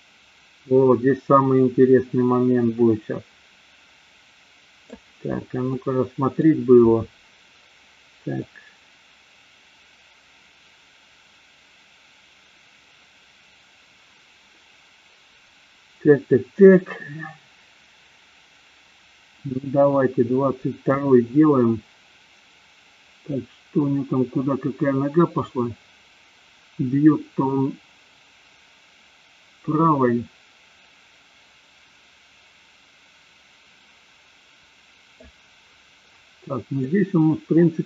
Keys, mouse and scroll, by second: 5.6 middle click, 8.8-21.3 drag, 25.8-35.5 drag, 36.9-37.8 middle drag.